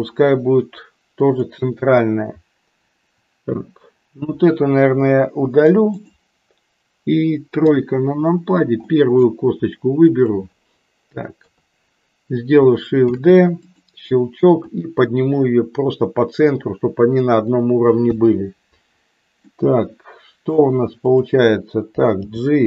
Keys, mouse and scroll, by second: 5.4 Delete, 7.6 KP_3, 8.9 middle click, 10.0 click, 11.5 KP_3, 13.0 shift+d, 14.8-17.5 drag, 18.1 KP_1, 19.5-20.8 middle drag, 22.1 g.